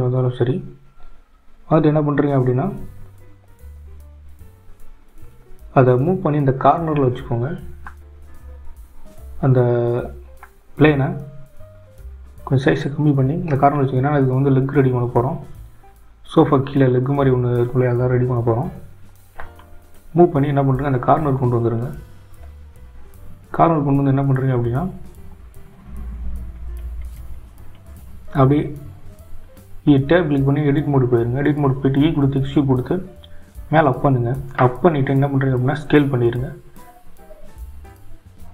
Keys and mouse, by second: 1.1-2.6 drag, 4.7 click, 5.4 click, 6.8 click, 7.9 s, 9.9 g, 13.5 h, 14.6 ctrl+z, 15.5 g, 26.3 click, 28.2 click, 31.8 g, 35.6 Tab, 36.4 e.